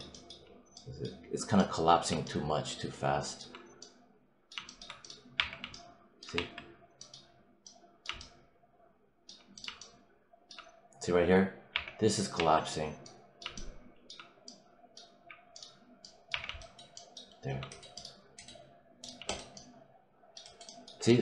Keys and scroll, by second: 5.2 3, 6.2 1, 11.6 3, 16.2 3.